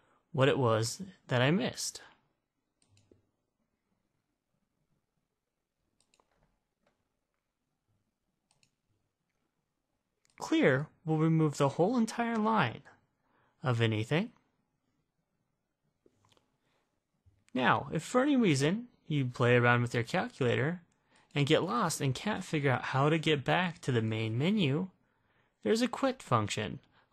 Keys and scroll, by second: 3.0 1, 8.8 ), 21.3 Left, 21.6 Left, 21.8 Left, 22.3 (, 22.6 (, 22.8 Left, 23.6 Left, 24.0 Left, 24.4 Left.